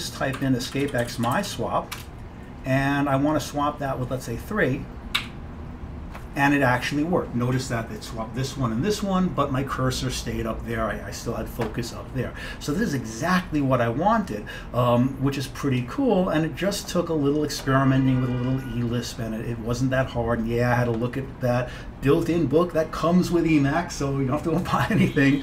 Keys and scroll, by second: 0.2-2.6 typing, 5.3 3.